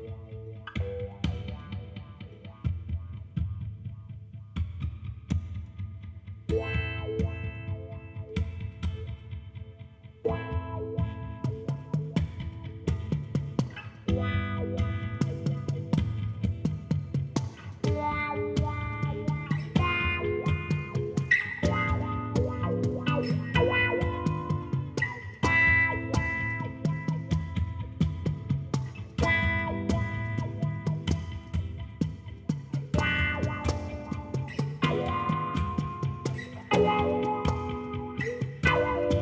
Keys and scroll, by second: 1.6 n, 22.7 i.